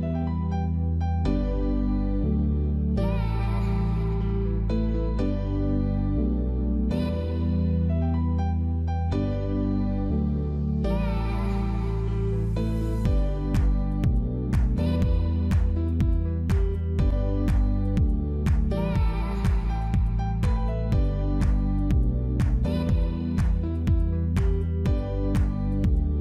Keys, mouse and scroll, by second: 1.0 scroll down 1, 1.5 Tab, 1.6 middle click, 2.5 Tab, 2.6 middle click, 5.1 click, 5.6 click, 6.1 click, 6.3-6.7 scroll up 2, 6.5 middle click, 7.2 click, 7.3 middle click, 8.3 shift+click, 8.5 middle click, 9.3 s, 10.9 middle click, 12.1 Tab, 12.2 scroll down 3, 12.3 middle click, 13.2 ctrl+s, 14.3 middle click, 14.5 middle click, 15.0 scroll up 1, 15.3 middle click, 15.6 shift+middle click, 16.0-16.4 scroll down 2, 17.1 middle click, 17.3 Tab, 17.5 scroll up 2, 17.7 middle click, 18.6 middle click, 19.5 click, 20.1 click, 20.8 click, 21.3 middle click, 22.0 middle click, 22.8 scroll up 1, 22.9 middle click, 23.7 click, 24.3 click, 24.7 click, 25.7 g.